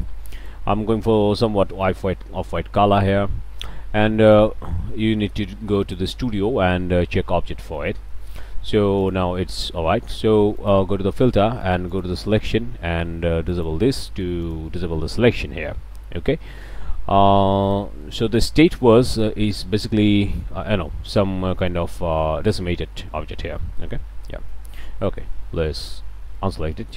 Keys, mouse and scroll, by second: 0.3-0.7 drag, 1.8 click, 2.4 click, 4.2 drag, 5.8 drag, 7.8 middle click, 8.0 click, 8.0 scroll up 1, 8.1 drag, 8.4 alt+a, 8.7-9.3 alt+drag, 10.6 drag, 11.6 click, 13.5 click, 14.0-14.4 middle drag, 14.5 drag, 14.8-16.9 drag, 17.6 click, 18.0 drag, 18.5 drag, 18.7 Tab, 18.9-19.8 drag, 20.3-21.9 drag, 22.4-23.8 drag, 23.8 Tab, 24.5 click, 25.8 click, 26.3 shift+middle click, 26.5 shift+click, 26.7 shift+click.